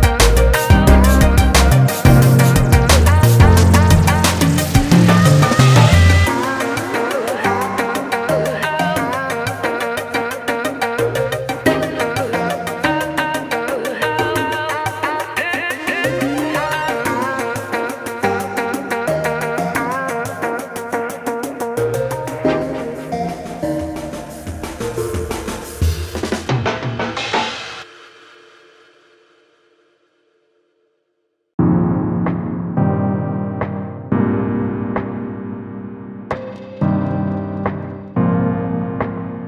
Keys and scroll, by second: 7.9 |, 23.4 ctrl+Return, 23.8 ctrl+space, 31.5 shift+F6, 35.3 Delete, 39.1 ctrl+d.